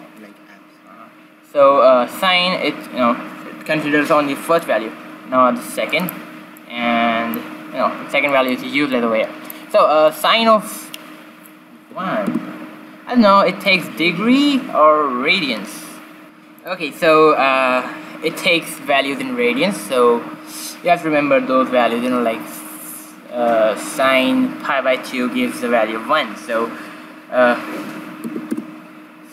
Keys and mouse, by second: 4.5-11.7 drag, 13.6-15.4 drag, 16.5-18.2 drag.